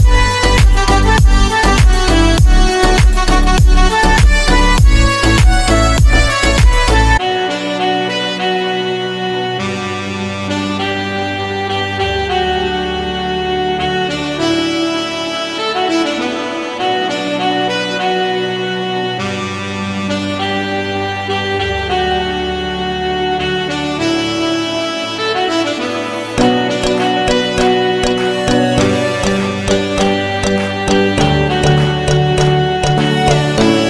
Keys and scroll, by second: 29.0 F3.